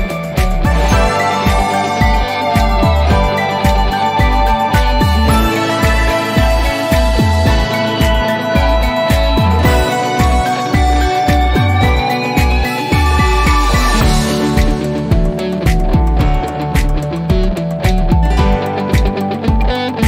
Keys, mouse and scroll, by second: 15.4 click, 19.3 click.